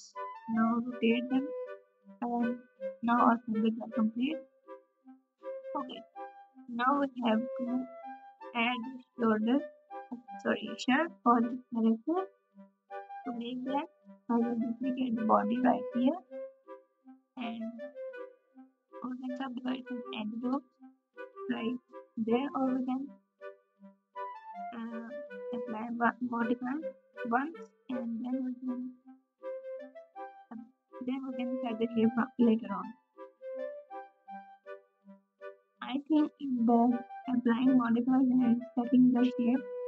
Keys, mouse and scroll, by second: 2.2 KP_Subtract, 2.2 KP_1, 3.7 alt+z, 21.0 1, 21.0 g, 25.4 alt+z, 26.6 g.